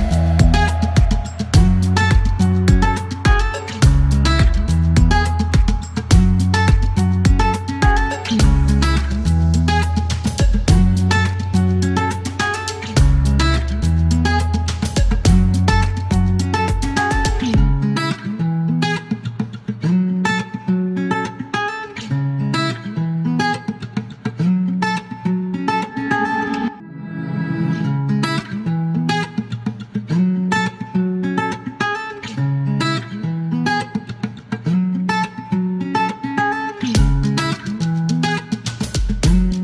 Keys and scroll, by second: 1.1 t, 1.7 l, 2.5 F1, 4.9 Delete, 9.8 Delete, 10.5 F4, 11.2 e, 12.2 l, 14.0 alt+l, 17.6 F1, 19.8 shift+s, 21.4 F2, 21.5 F3, 22.1 shift+v, 31.7 F1, 32.8 KP_0, 34.2-34.7 typing, 37.3 typing.